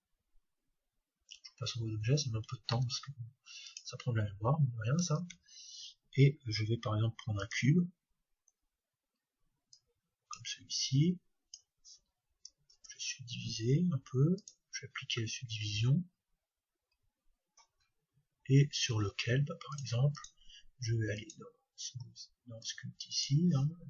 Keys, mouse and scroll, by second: 5.2 shift+a, 8.7-10.3 middle drag, 9.8-12.7 drag, 12.7 ctrl+3, 14.4-16.2 drag, 16.1-19.7 middle drag, 18.5-20.6 scroll down 1, 19.7-22.0 drag, 22.6-23.8 drag.